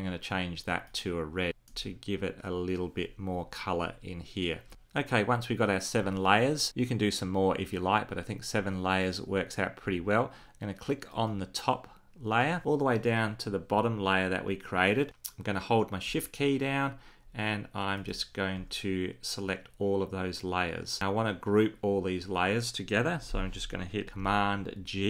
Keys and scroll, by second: 24.1 super+g.